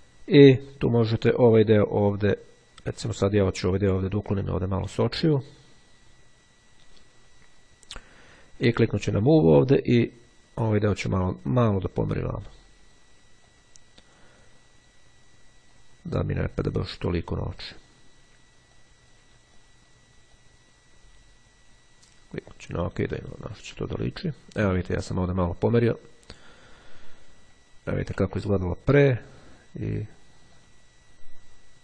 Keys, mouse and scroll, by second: 1.7-3.5 drag, 6.5-8.2 drag, 8.8 click, 12.3-13.5 drag, 16.1 click, 17.1 click, 17.7 click, 18.3 click, 20.4 click, 22.5-23.7 drag, 28.1 ctrl+z, 30.5 click.